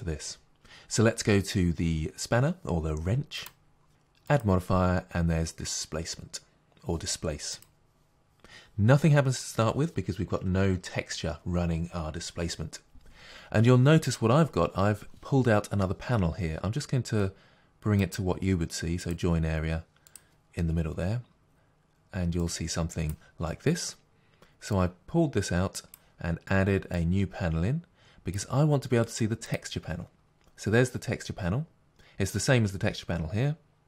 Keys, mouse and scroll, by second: 7.6 click, 19.1-22.5 right drag, 22.5 click.